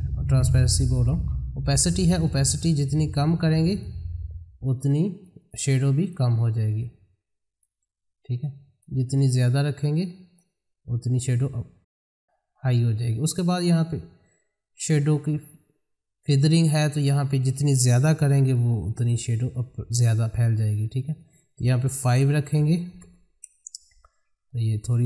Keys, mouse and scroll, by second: 0.9-12.6 drag, 16.9 click, 21.0 click, 24.6-25.0 scroll up 1.